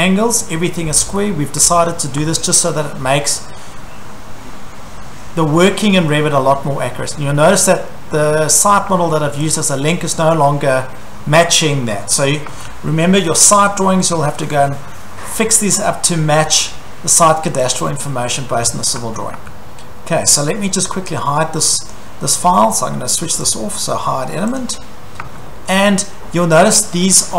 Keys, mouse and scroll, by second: 1.6 Escape, 1.7-2.1 scroll, 2.2 Escape, 2.6 scroll, 3.6 scroll, 6.5-7.5 scroll, 8.2-8.9 scroll, 8.9 Escape, 9.6 click, 9.8-10.8 scroll, 12.5 Escape, 12.5 scroll, 15.1-15.6 scroll, 16.5 scroll, 17.8 click, 18.4-18.7 scroll, 19.0 Escape, 19.4 Escape, 20.8 scroll, 21.1 Escape, 21.9 click, 23.5 click, 24.6 click, 25.2 Escape, 25.7 scroll, 26.7 click.